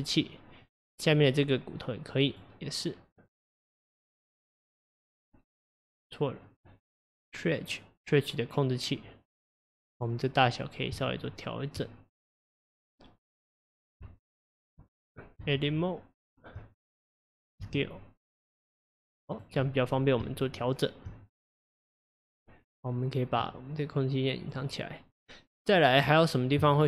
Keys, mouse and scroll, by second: 0.3 middle click, 1.2 click, 2.3 click, 4.0-5.7 middle drag, 5.7 click, 6.5 click, 10.0 click, 10.5 click, 11.0 Tab, 12.3 click, 14.1 q, 15.0 click, 15.5 Tab, 17.6 s, 19.7 middle click, 20.3 Tab, 21.7-22.7 middle drag, 22.7 click, 24.5 click, 25.1-26.8 middle drag.